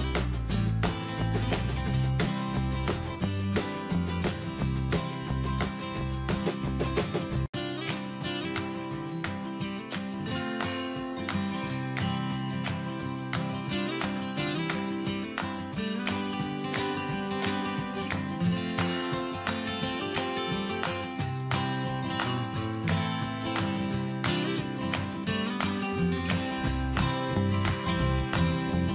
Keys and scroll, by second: 18.4 Return.